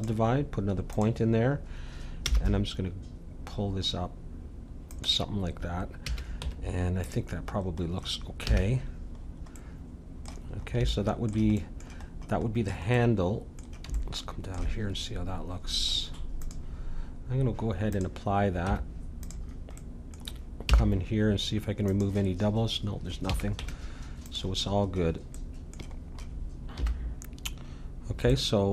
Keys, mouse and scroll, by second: 0.9-2.8 drag, 2.2 g, 6.0 a, 6.4 Tab, 8.5 a, 16.4-20.6 drag, 18.6 Tab, 20.6 middle click, 20.6 a, 21.9-24.4 drag, 23.3 a, 23.6 Tab, 24.8 middle click, 26.8 KP_1.